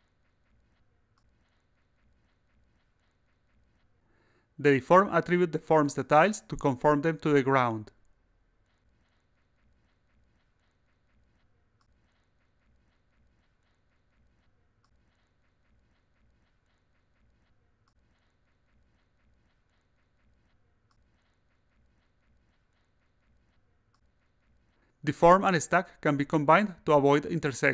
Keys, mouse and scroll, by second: 0.1 click, 1.5 click, 1.8 a, 4.0-13.4 drag, 14.4 click, 15.0-23.9 drag, 24.2-25.4 drag, 26.2-27.7 drag.